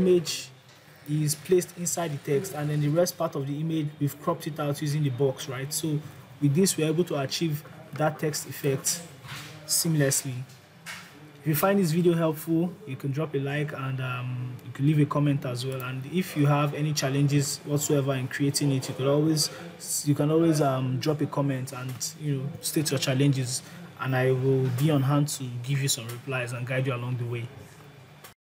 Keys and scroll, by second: 6.0 ctrl+z.